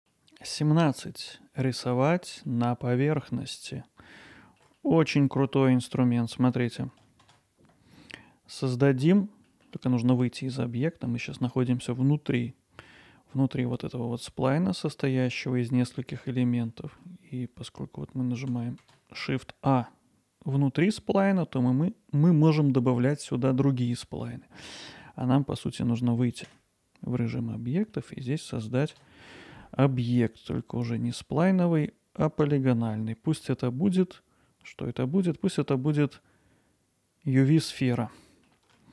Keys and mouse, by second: 0.2 middle click, 2.8 middle click, 3.7 alt+middle click, 4.8 middle click, 7.3 shift+a, 9.5 middle click, 11.0 middle click, 16.7 middle click, 18.8 shift+a, 26.5 Tab, 28.1 middle click, 28.9 shift+a, 38.2-38.5 middle drag.